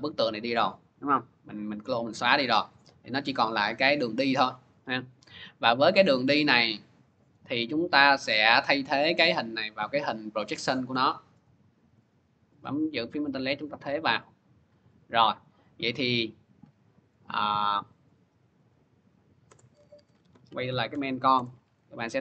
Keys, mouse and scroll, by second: 1.8 click, 3.1 click, 7.1 click, 9.0 click, 10.4 click, 13.4 alt+click, 15.3 click, 17.7 click, 19.3 Return, 19.5-21.4 typing.